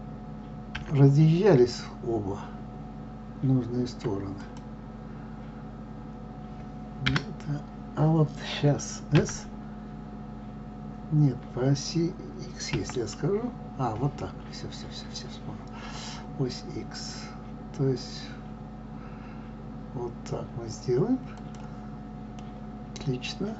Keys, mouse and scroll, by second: 22.3-23.5 middle drag.